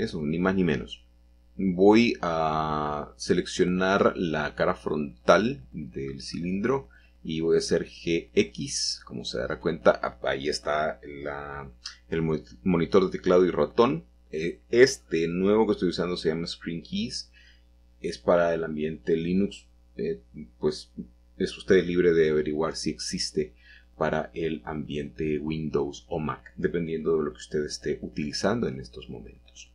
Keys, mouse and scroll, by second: 1.1 Escape, 1.4 middle click, 2.2 shift+middle click, 2.6 shift+middle click, 3.8 middle click, 5.1-6.4 shift+middle drag, 7.0 click, 7.3 middle click, 8.5-10.8 middle drag, 8.5 g, 9.6 x, 11.2 click, 12.0 shift+middle click, 12.3 shift+middle click, 12.5 shift+middle click, 12.8 middle click, 13.2 middle click, 15.0 l, 16.1-17.2 middle drag, 20.1 click, 21.5 3, 23.7-24.3 scroll up 4, 25.2-26.2 shift+middle drag, 27.5-28.6 drag, 28.6 g.